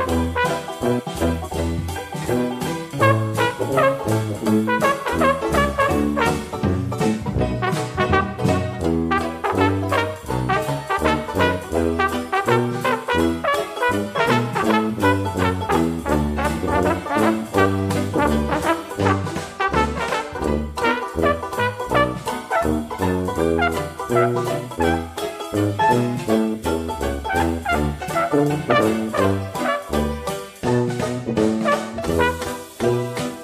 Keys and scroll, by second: 21.6 Delete.